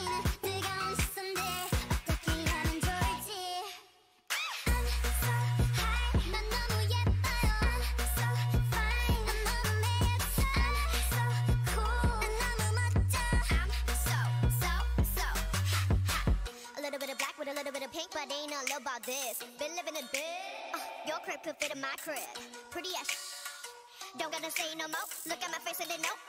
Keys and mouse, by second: 0.3 Tab, 4.8 Tab, 5.9 a, 7.1 ctrl+r, 7.9 a, 8.3 Tab, 9.0 Tab, 9.3 click, 9.9 click, 10.1 g, 12.8 g, 15.0 g, 16.0 Tab, 17.8 Tab, 18.4-20.0 drag, 18.7 g, 19.9 Tab, 20.1 middle click, 20.9 Tab, 21.0 middle click, 21.5-23.3 drag, 22.1 g, 24.0 g, 25.5 g.